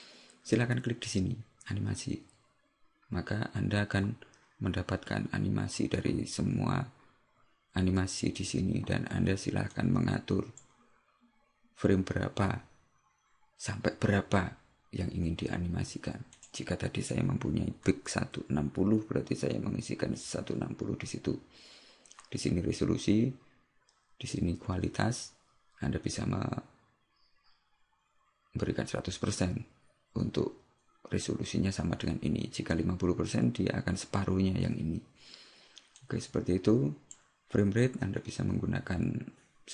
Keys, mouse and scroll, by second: 9.8 click, 16.4 click, 36.2 click.